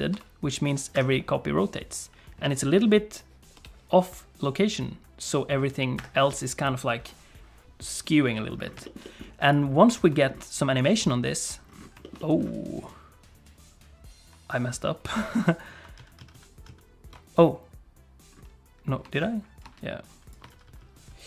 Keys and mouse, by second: 0.1 r, 3.5 g, 8.8 shift+middle click, 9.0 middle click, 10.2 shift+middle click, 10.9 click, 12.0 shift+middle click, 12.2 middle click, 12.8-15.6 drag, 16.0 ctrl+z, 16.2 ctrl+z, 16.3 ctrl+z, 16.7 ctrl+z, 19.0 space, 19.6 space, 20.0 click, 20.5 ctrl+z, 20.6 ctrl+z, 20.8 ctrl+z, 20.9 ctrl+z, 21.1 ctrl+z.